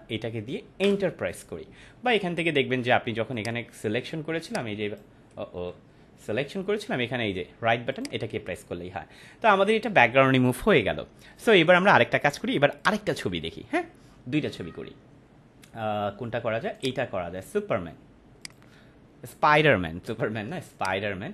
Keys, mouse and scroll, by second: 3.3 click, 5.7 ctrl+z, 7.9 click, 9.5 ctrl+=, 12.8 click, 16.7 right click, 18.4 click, 20.7 click, 20.9 click.